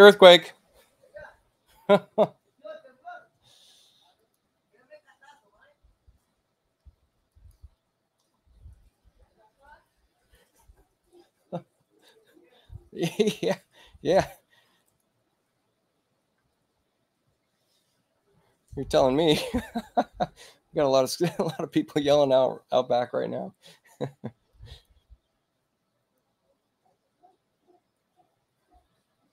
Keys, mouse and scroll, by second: 4.1 click, 7.2 ctrl+click, 14.8 click, 24.4 click.